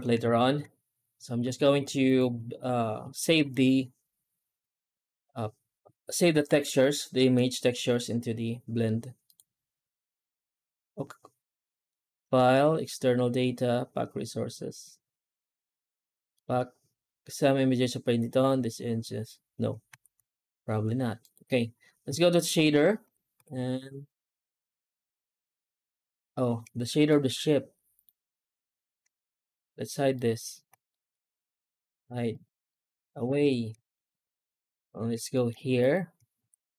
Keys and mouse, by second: 0.0 ctrl+space, 1.9-10.7 drag, 11.9-19.0 drag, 19.8 ctrl+s, 21.2-22.0 drag, 22.9 a, 23.2 KP_Decimal, 27.0 shift+middle drag, 27.8 right click, 28.3 shift+right click, 29.0 right click, 30.0 shift+right click, 30.7 middle drag, 31.6 right click, 32.2 shift+right click, 33.1 h, 33.8 shift+middle drag, 34.3 alt+middle click, 34.7 middle drag, 35.2 shift+middle drag, 35.6 right click, 36.3 ctrl+s.